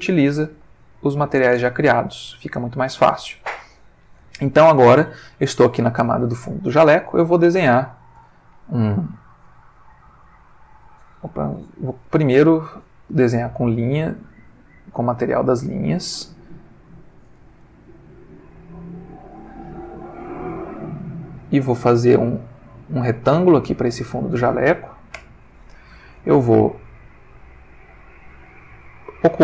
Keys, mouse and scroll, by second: 0.7 ctrl+middle click, 2.0 ctrl+middle click, 5.0 click, 7.9 click, 9.3-11.2 drag, 11.6 ctrl+z, 12.4 ctrl+Escape, 13.4 click, 14.2 click, 15.0 click, 15.9 click, 17.2-19.5 drag, 20.8-22.9 drag, 25.2 Return, 28.4 click.